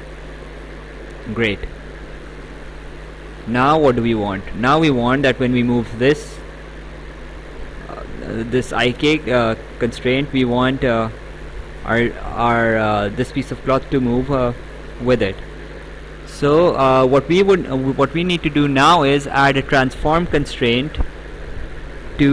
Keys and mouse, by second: 3.1 click, 5.1 click, 20.9 click.